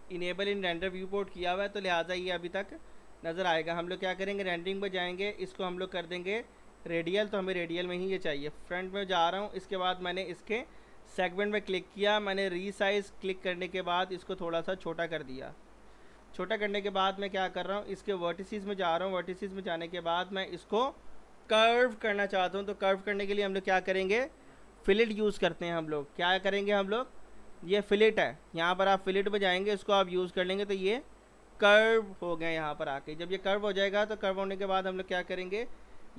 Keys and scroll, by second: 1.4 p, 2.2 z, 8.4 f, 8.7 z, 34.3 w, 35.5 p.